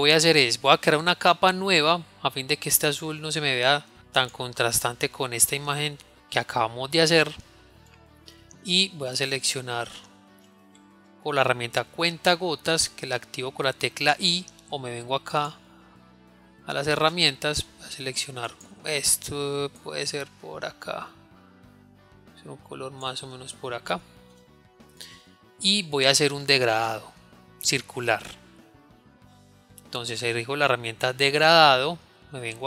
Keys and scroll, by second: 14.0 i, 16.6 |.